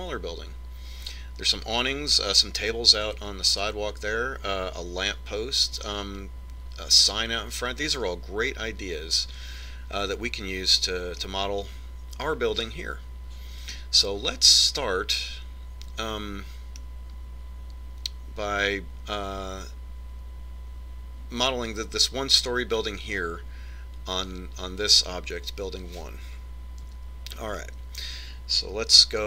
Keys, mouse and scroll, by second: 11.4-12.9 middle drag, 13.1 middle click, 15.4-17.3 middle drag, 27.2 KP_1.